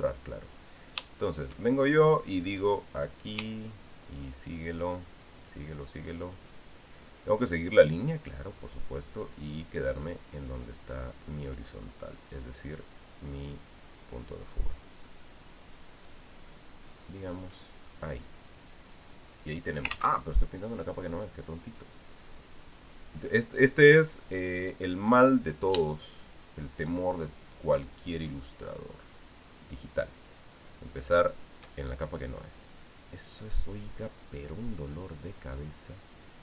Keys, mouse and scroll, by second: 4.0 shift+click, 17.7 shift+click, 20.7 ctrl+z, 21.5 click, 26.4 shift+click, 32.0 shift+click.